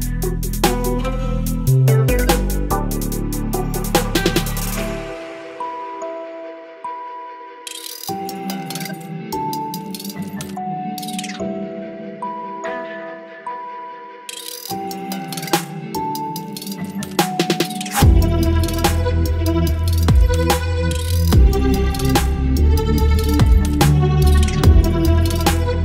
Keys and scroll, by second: 0.0 Delete, 1.0 Delete, 1.8 Delete, 3.8 Delete, 4.8 Delete, 6.1 Delete, 6.3 space, 7.6 Delete, 8.2 Delete, 10.5 ctrl+BackSpace, 11.4 Delete, 14.4 ctrl+BackSpace, 16.5 space, 18.5 ctrl+BackSpace, 19.9 Delete, 20.9 Delete, 21.2 space, 22.3 Delete, 22.9 space, 25.2 Delete.